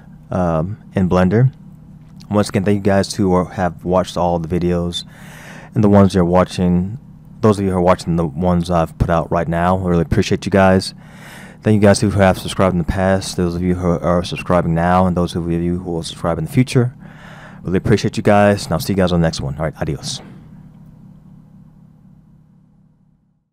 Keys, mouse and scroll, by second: 1.0-2.3 scroll down 2.